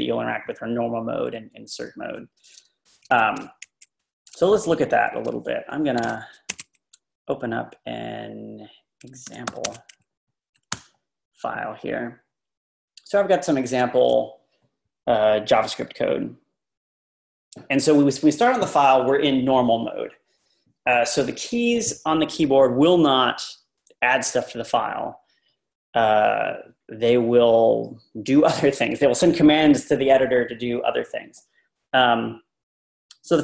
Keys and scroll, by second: 1.9 Right, 3.1 Left, 3.6 super+Tab, 5.9-6.5 typing, 9.0-9.8 typing, 10.7 Return.